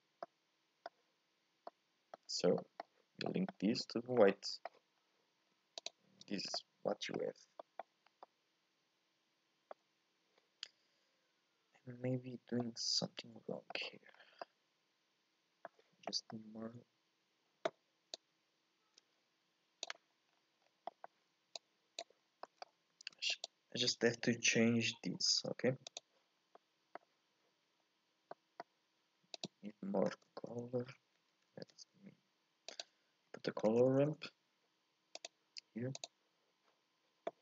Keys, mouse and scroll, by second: 5.0-5.9 scroll down 1, 5.9 ctrl+shift+click, 6.4 scroll down 1, 6.5 middle click, 7.2 scroll up 1, 7.6 shift+middle click, 8.0 scroll up 1, 8.2-14.1 middle drag, 14.1-14.5 scroll down 1, 14.5-18.2 middle drag, 18.2-19.5 drag, 19.5 KP_Divide, 21.6 click, 26.4 scroll up 1, 26.5-35.3 middle drag.